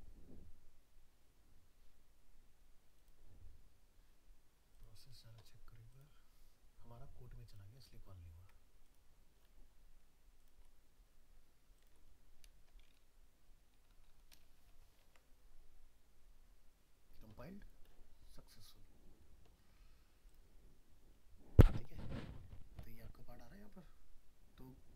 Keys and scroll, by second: 15.0 ctrl+s.